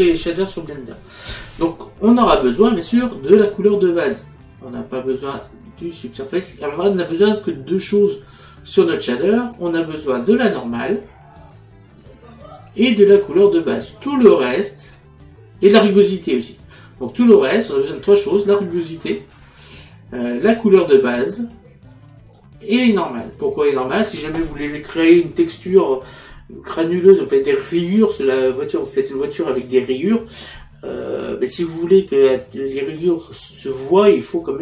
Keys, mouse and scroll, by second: 5.3 click, 6.6 click, 7.9 click, 9.3 click, 11.4 click, 12.5 click, 13.6 click, 17.9 click, 19.1 click, 20.2 click, 21.4 click, 22.4 click.